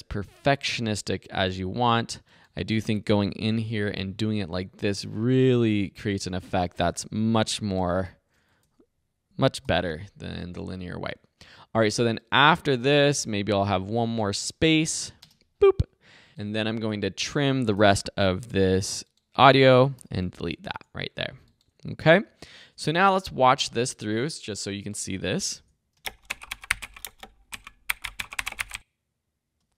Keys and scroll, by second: 2.9 Right, 3.5 i, 6.9 Right, 7.8 ;, 8.6 BackSpace, 9.6 l, 14.8 Right, 15.2 space, 17.8 c, 20.0 v, 20.7 BackSpace, 22.8 -, 25.5 `, 26.0 space, 29.6 space.